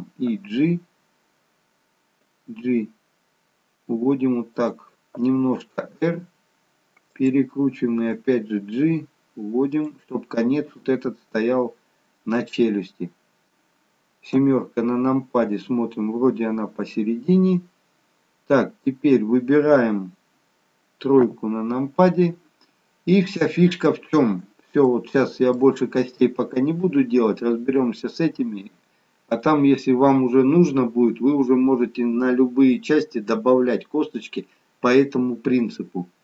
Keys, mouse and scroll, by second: 5.8 r, 8.5 g, 14.4 KP_7, 21.4 KP_3, 23.2-23.6 scroll down 1, 24.3-25.0 scroll down 2, 25.0 shift+middle click, 26.0-26.7 scroll up 1, 26.7-27.9 scroll up 1, 29.4 click.